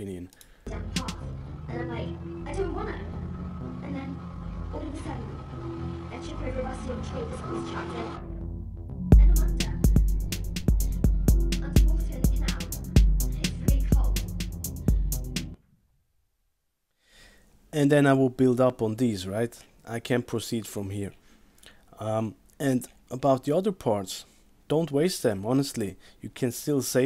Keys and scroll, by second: 15.5 space.